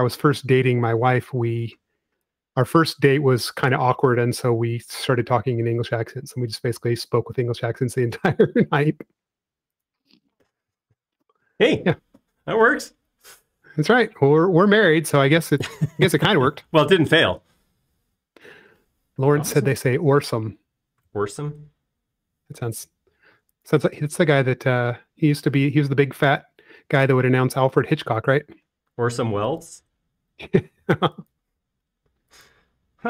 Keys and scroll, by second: 0.8 space, 4.3 m, 20.0 space, 29.6 |.